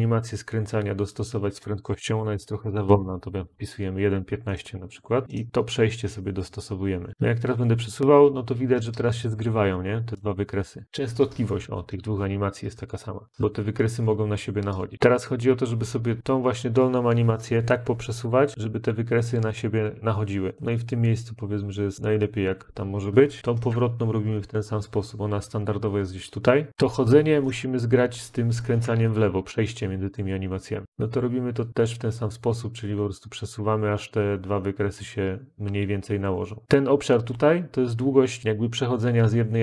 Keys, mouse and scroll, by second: 1.1 click, 1.8-3.0 typing, 5.2 click, 5.2 typing, 14.9 click, 15.3 click, 19.2 click, 22.5 click, 23.4 click, 25.5 click, 30.0 click, 36.6 click.